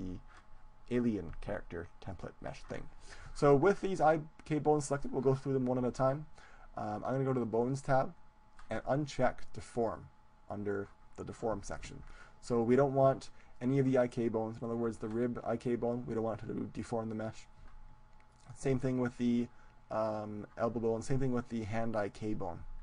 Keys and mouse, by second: 2.1-7.6 right drag, 7.6-12.7 drag, 12.7-19.1 right drag, 18.3-21.0 drag, 21.1-22.8 right drag.